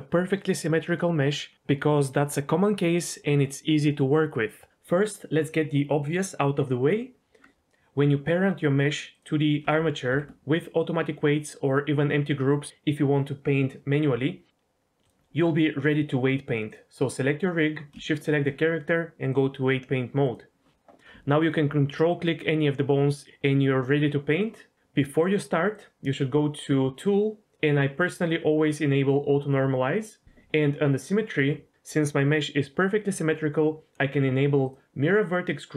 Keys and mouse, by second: 10.1 ctrl+p, 19.4-20.3 drag, 21.4 ctrl+click, 28.2 click, 34.6 click.